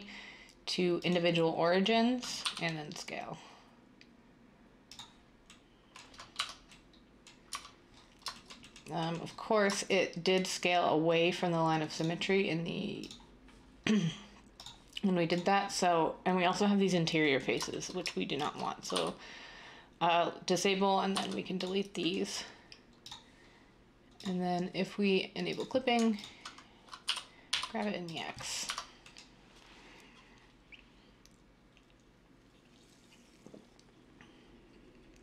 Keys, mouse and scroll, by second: 2.4 s, 6.4 Tab, 7.6 Tab, 18.9 x, 21.1 x, 27.0-27.5 typing, 28.6 Tab.